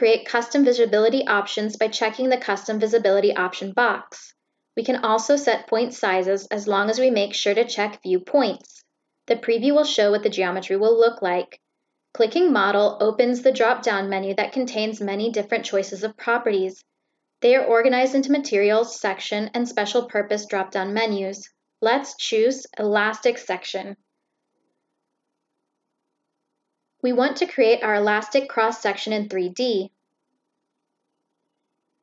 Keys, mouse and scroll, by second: 0.6 click, 1.2 click, 2.0 click, 6.6 click, 10.3 click, 11.6 click, 26.5 click, 28.6 click, 31.9 click.